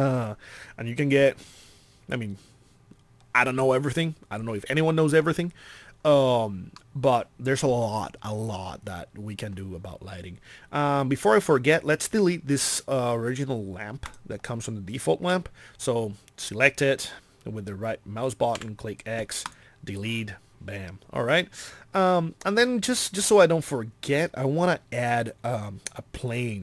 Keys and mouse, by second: 18.6 x.